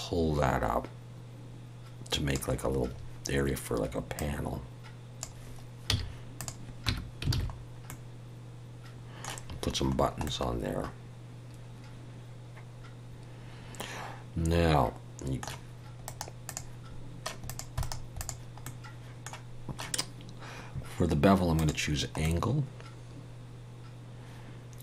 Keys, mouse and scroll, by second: 4.1 click, 5.9 z, 6.9 Tab, 7.3 alt+a, 7.6 scroll down 1, 7.9 middle click, 9.9-10.2 scroll down 1, 10.2 middle click, 16.0 right click, 17.5 click, 18.0 right click, 18.6 middle click, 21.6 click, 22.2 middle click.